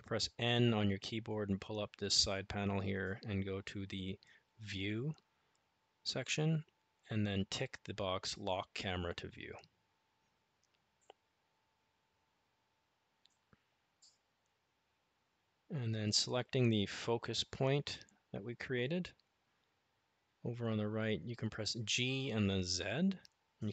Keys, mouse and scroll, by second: 0.4 n, 3.2 click, 16.8 click, 21.2 g.